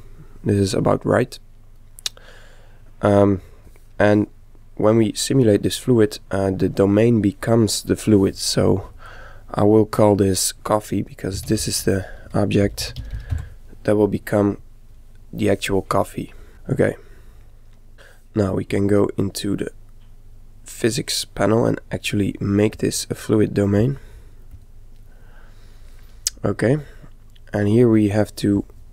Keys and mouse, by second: 2.5-4.3 middle drag, 4.5-7.6 middle drag, 9.0 click, 16.0-18.3 middle drag, 19.6 click, 22.7-25.4 drag, 27.5-28.9 middle drag.